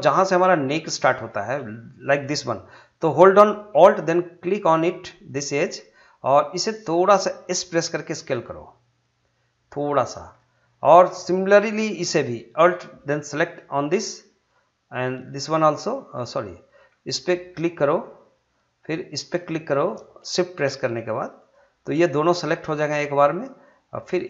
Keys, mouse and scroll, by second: 1.8 scroll up 1, 2.0 middle click, 5.2 alt+click, 6.2 middle click, 7.8 s, 10.0 click, 10.0 click, 10.4-13.4 middle drag, 13.4 alt+click, 17.1 alt+click, 19.3 alt+click, 22.3-24.2 middle drag.